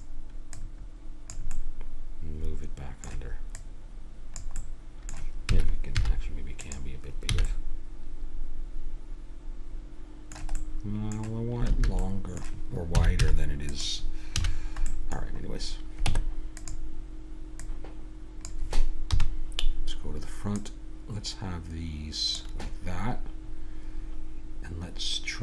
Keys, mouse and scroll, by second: 0.5-1.6 drag, 1.6-2.6 middle drag, 2.8 middle click, 3.5-5.2 drag, 5.2-6.6 middle drag, 5.5 s, 7.3 a, 7.5 middle click, 10.6-14.3 middle drag, 11.7 a, 12.9 s, 14.3 a, 14.5 middle click, 16.1 Tab, 19.1 KP_1, 20.6-22.3 drag.